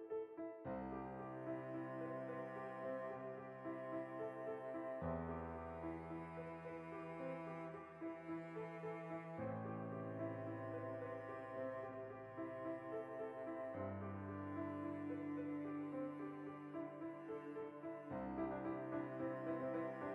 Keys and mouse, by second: 0.3 click, 0.5-2.1 middle drag, 2.1 ctrl+r, 2.8 right click, 3.0 ctrl+r, 3.7 alt+shift+right click, 4.1 g, 6.1 shift+click, 6.3 shift+middle click, 6.8 3, 6.8 right click, 7.8-9.2 middle drag, 9.2 ctrl+right click, 9.4 middle click, 9.8 ctrl+shift+right click, 10.2-14.1 middle drag, 14.1 ctrl+right click, 14.4 middle click, 15.3 shift+right click, 15.4 middle click, 15.7 ctrl+right click, 15.9 middle click, 16.2 shift+d, 16.4 right click, 16.5-18.9 ctrl+middle drag, 17.0 ctrl+i, 17.2 h, 18.7 2, 18.9 right click, 19.7 f.